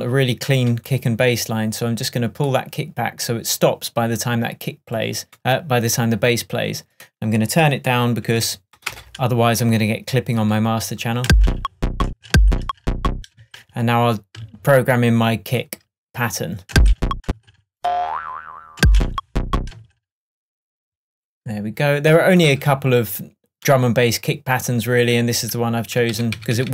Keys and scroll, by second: 8.3 -, 8.9 Return, 11.3 space, 18.8 space, 26.1 super+d.